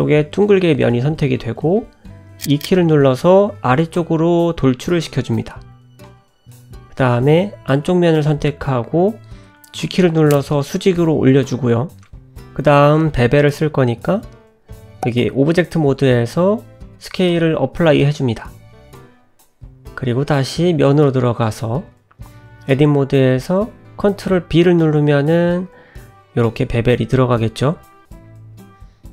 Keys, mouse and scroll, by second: 0.2 e, 4.9 click, 6.6 g, 9.8 middle click, 11.4 g, 12.8 middle click, 13.4 Tab, 14.4 ctrl+a, 17.2 ctrl+a, 19.9 Tab, 20.9 middle click, 21.5 click, 22.6 click, 25.2 ctrl+b.